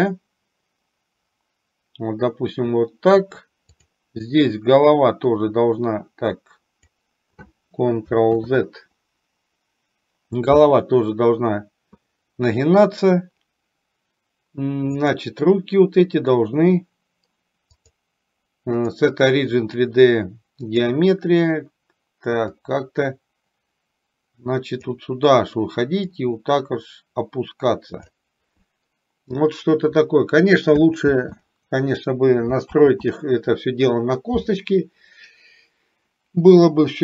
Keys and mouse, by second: 3.8 click, 4.9 click, 5.2-7.0 drag, 8.4 ctrl+z, 15.0 click, 17.8-21.0 drag, 22.7 click, 22.9-24.9 drag, 26.2-28.2 drag, 31.2 ctrl+z, 32.8 ctrl+z.